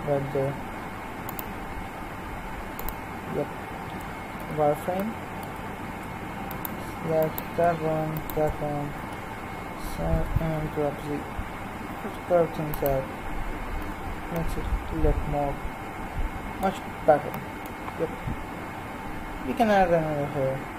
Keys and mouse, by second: 0.2 ctrl+r, 4.4 z, 6.4-9.0 right drag, 9.0 KP_3, 10.1 g, 13.8 z.